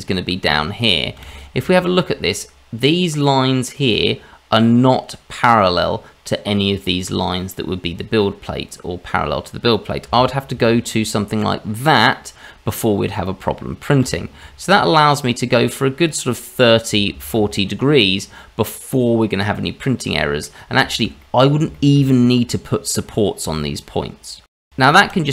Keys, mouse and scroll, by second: 1.6 shift+z, 1.7-4.3 scroll up 4, 4.9-5.3 scroll down 2, 5.6-6.5 scroll up 2, 10.0 r, 14.0 r, 16.5-16.9 scroll down 1, 17.1 shift+z, 17.5 middle click, 20.5-20.8 scroll up 2, 20.8 shift+middle click, 21.2 middle click, 21.7 shift+middle click, 24.4 middle click, 25.1 ctrl+z.